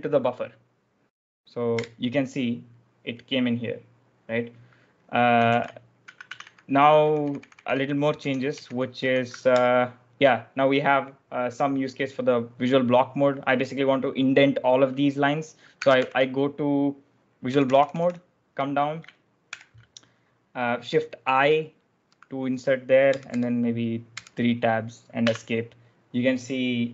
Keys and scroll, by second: 1.7 Return, 5.3-9.9 typing, 15.9 ctrl+v, 17.4 j, 18.0 j, 19.4 shift+i, 20.9 typing, 23.1 Tab, 24.1 Tab, 25.2 Escape.